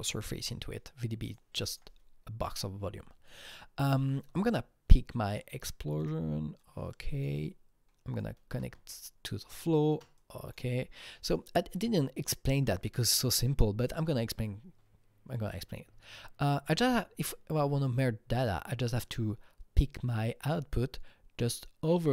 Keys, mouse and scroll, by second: 1.7 click, 5.2-6.0 click, 6.6 click, 7.3-11.7 shift+drag, 11.7 click, 12.5 Delete, 16.7 Delete, 16.7-22.1 drag.